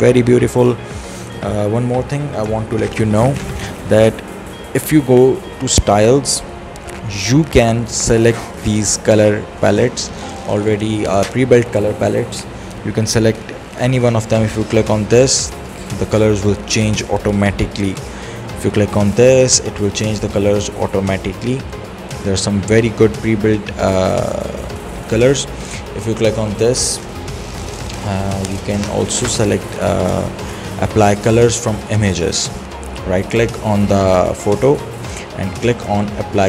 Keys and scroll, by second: 2.2 ctrl+z.